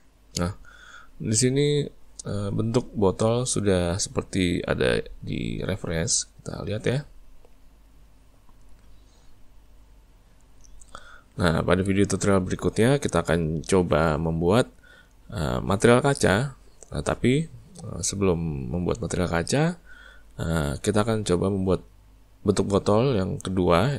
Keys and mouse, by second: 6.5 click, 7.0-8.7 middle drag, 8.7 click, 9.6 click, 11.2-16.7 middle drag.